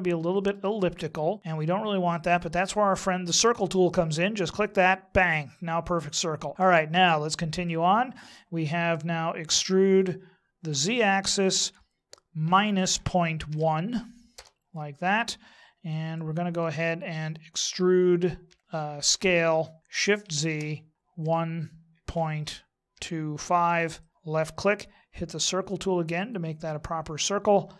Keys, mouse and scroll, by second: 4.5 click, 6.5 middle click, 9.4 e, 15.9 middle click, 18.4 e, 26.2 click.